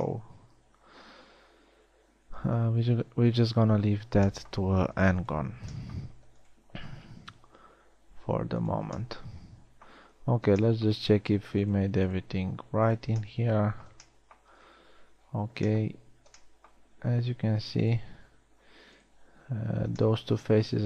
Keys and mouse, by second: 3.3 middle click, 5.7 click, 8.0 g, 11.8 g, 12.9 g, 14.0 middle click, 14.1 click, 14.8 middle click, 15.2 middle click, 15.9-16.4 middle drag, 17.9 g, 18.9 g.